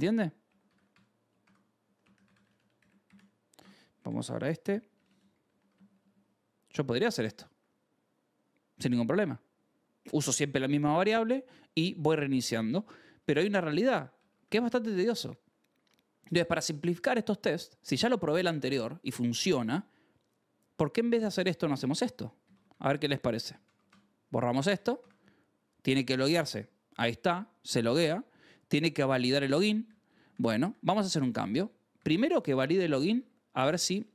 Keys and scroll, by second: 0.1-3.2 typing, 1.3 ctrl+s, 4.8 h, 5.4 l, 5.6 a, 5.6 BackSpace, 6.9 ctrl+s, 8.7 j, 12.3 k, 13.8-14.7 typing, 17.9 k, 19.2 k, 20.6-23.4 typing, 21.9 Escape, 23.6 Escape, 23.8 ctrl+s, 24.4 d, 24.6 Escape, 24.9 ctrl+s, 25.6 j, 26.3 j, 28.4-32.9 typing, 32.2 ctrl+s, 33.6 Escape, 33.9-34.1 typing.